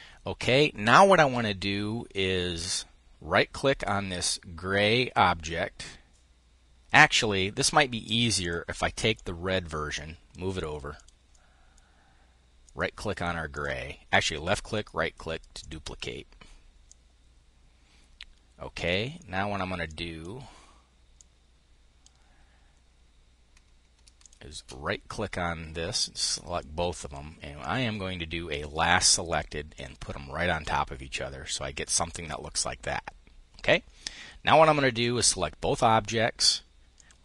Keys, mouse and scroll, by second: 7.2-9.7 drag, 10.9 click, 15.2 click, 16.4-18.8 drag, 19.4-20.9 drag, 23.8 shift+click, 24.6-27.3 drag, 28.1-29.7 drag, 31.1-32.8 drag, 33.4-34.8 drag, 36.6 click.